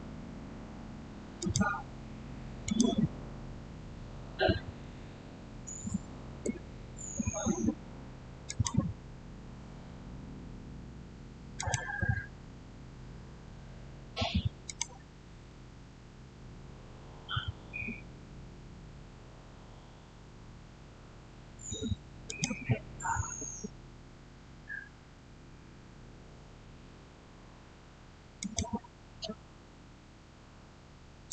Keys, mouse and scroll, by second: 1.2 click, 4.7-5.4 typing, 6.1 Return, 8.3 click, 11.4 click, 11.4 click, 14.5 click, 22.1 click, 28.2 click, 31.1 click.